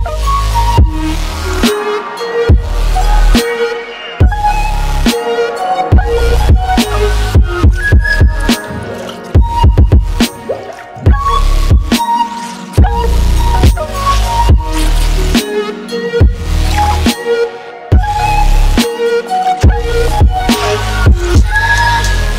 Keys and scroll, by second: 14.9 x.